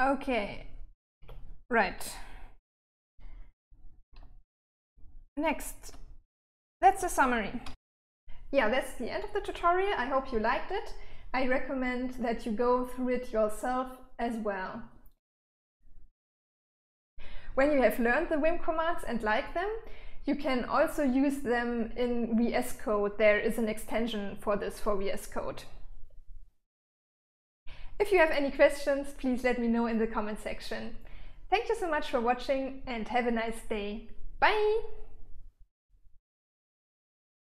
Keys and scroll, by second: 1.5 Escape, 4.4-7.4 typing.